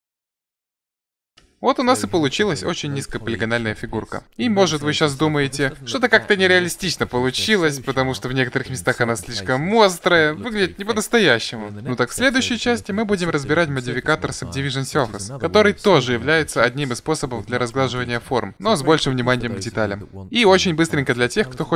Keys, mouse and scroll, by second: 0.3 Tab, 5.4-7.0 middle drag, 9.9 Tab, 10.1 middle click.